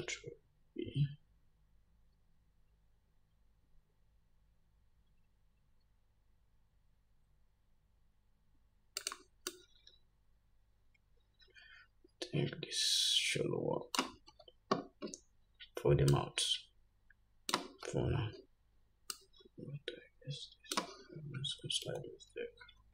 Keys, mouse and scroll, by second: 0.2 ctrl+b, 9.9-22.9 drag, 14.6 Tab, 18.1 Tab, 22.2 ctrl+z, 22.8 ctrl+z.